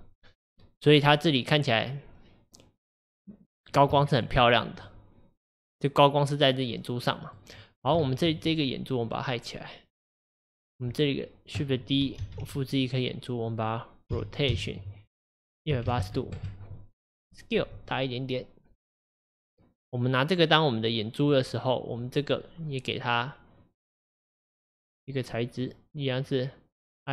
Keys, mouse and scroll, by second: 3.5-4.0 scroll up 1, 4.0-4.5 shift+middle drag, 4.5-4.9 scroll up 2, 4.9-7.6 middle drag, 7.6-8.1 scroll down 2, 8.1-8.6 shift+middle drag, 8.6 click, 10.0 click, 10.6-11.0 scroll up 2, 11.0 click, 12.3 shift+d, 14.1 r, 24.9-27.1 drag.